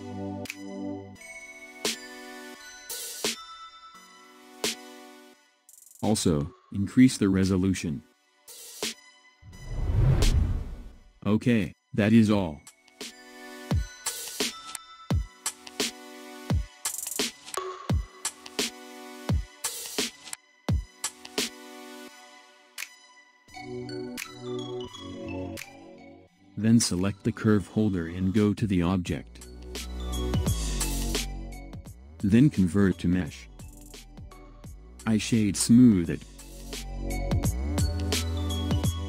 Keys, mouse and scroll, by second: 0.1-0.9 shift+middle drag, 0.9-1.7 scroll up 2, 1.7-2.1 scroll up 3, 2.1-5.2 middle drag, 6.1-9.5 drag, 10.1 scroll down 10, 11.5 click, 12.3-15.3 middle drag, 22.4 KP_1, 23.6-24.9 scroll down 1, 24.9-27.2 scroll up 1, 27.2 click, 30.6-33.6 drag, 35.4-37.9 right drag, 37.9-38.5 scroll up 1, 38.5-39.0 middle drag.